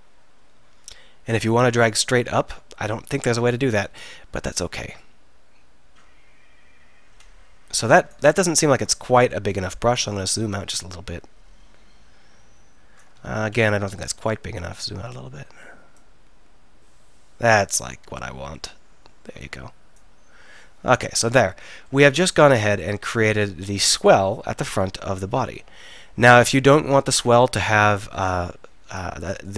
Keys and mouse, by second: 8.7 ctrl+z, 12.5-13.3 middle drag, 13.3 ctrl+z, 18.0-20.7 middle drag, 20.7 z, 21.7 z.